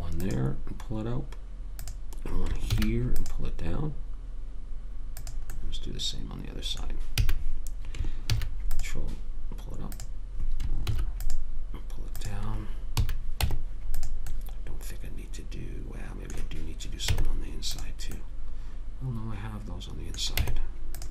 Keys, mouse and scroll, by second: 3.1 ctrl+r, 5.9 click, 7.5 a, 8.6 ctrl+r, 11.2 ctrl+r, 13.3 a, 13.7 Tab, 17.4 Tab, 20.7 Tab.